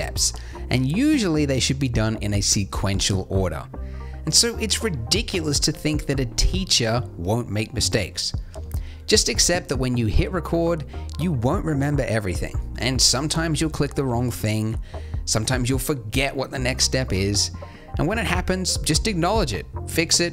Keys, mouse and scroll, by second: 1.1 shift+a, 3.4-5.4 drag, 7.3 click, 12.1 KP_1, 12.8 ctrl+alt+KP_0, 14.2 n, 15.4 n, 17.0 g, 17.8 g, 19.2 g, 20.0 g.